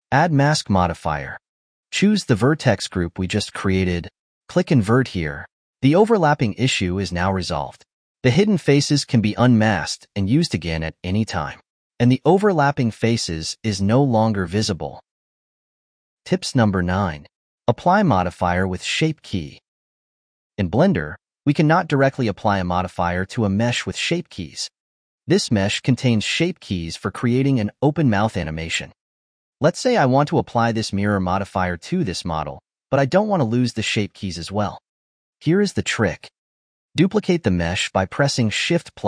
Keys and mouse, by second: 0.5 click, 2.9-4.6 drag, 5.1-6.1 drag, 6.1-9.0 ctrl+middle drag, 9.0 click, 9.4 click, 9.9 click, 11.0 alt+h, 11.5 click, 12.3-13.5 ctrl+shift+middle drag, 13.5 click, 14.5 click, 15.1-15.7 ctrl+middle drag, 16.9-21.3 middle drag, 21.3-22.7 drag, 25.9 click, 27.1 click, 29.9-32.0 drag, 32.8 click, 35.4 click, 36.2 4, 36.3 shift+middle click, 36.8 click, 38.0 shift+d.